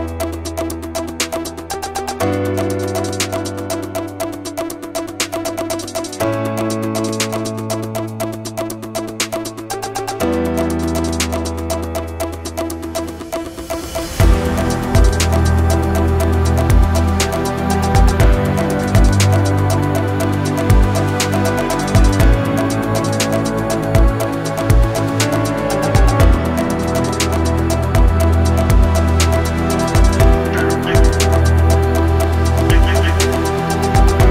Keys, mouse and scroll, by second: 0.0 s, 1.4 scroll down 1, 2.4 shift+middle drag, 2.4 scroll down 7, 3.2 s, 6.3-6.8 middle drag, 8.0-11.1 drag, 11.7 s, 14.7 s, 18.5-19.0 middle drag, 19.6 n, 21.6 click, 22.8 click, 23.4-24.8 drag, 26.5 r, 28.8-29.1 scroll up 2, 29.1 shift+middle click, 29.6 n, 30.3 t, 30.7-31.3 shift+middle drag, 33.7 click.